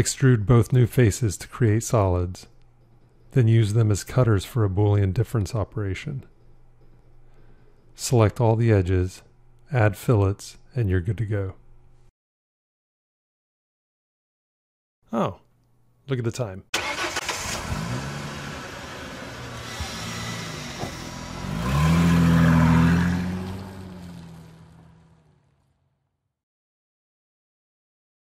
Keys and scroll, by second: 6.1 q.